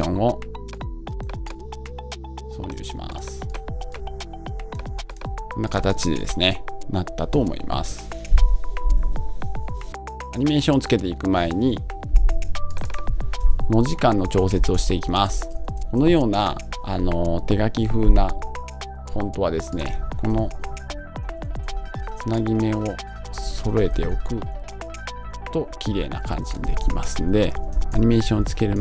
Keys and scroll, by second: 13.6 Left, 14.2 Right, 15.0 Left, 20.5 Left, 20.7 alt+Right, 21.5 Right, 23.3 Left, 25.2 Left, 25.7 Up, 26.2 Left, 26.5 Right, 27.1 Down, 27.7 Right.